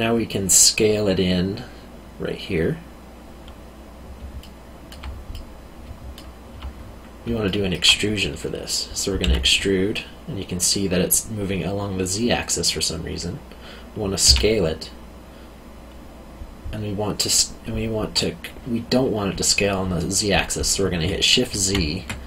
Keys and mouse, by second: 4.4 alt+middle click, 7.4 alt+middle click, 9.2 e, 14.2 s, 21.5 shift+z.